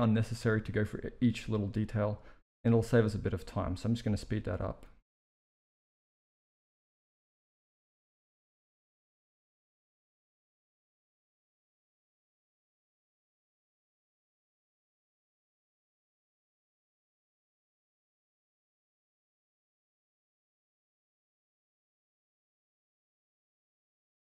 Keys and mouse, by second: 0.6 s, 4.8 g, 5.3 KP_1, 5.5 s, 6.1 click, 6.5 middle click, 6.6 Tab, 6.7 middle click, 6.8 ctrl+r, 7.1-9.9 typing, 7.6 ctrl+r, 9.2 click, 9.6 click, 10.1 Tab, 10.4 click, 11.0 click, 11.3 click, 11.5-15.8 typing, 11.6 middle click, 11.8 Tab, 12.4-12.8 drag, 14.0 middle click, 14.2 ctrl+r, 15.0 click, 15.4 click, 16.2 click, 16.4 ctrl+r, 16.7 click, 16.9-22.3 typing, 17.2 click, 17.8 click, 18.4 click, 19.0 click, 19.6 click, 20.1 click, 20.5 Tab, 21.0 shift+middle click, 21.1 Tab, 21.2 click, 22.1 click, 22.8 ctrl+r, 23.0 alt+s, 23.6 middle click, 23.7 z, 23.9 middle click, 24.0 Tab, 24.2 right click.